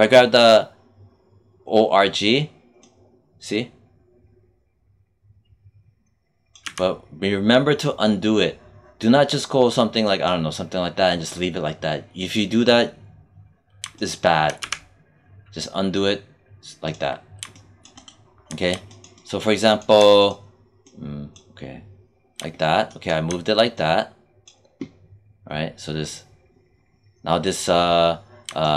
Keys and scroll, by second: 6.5 z, 14.5 z.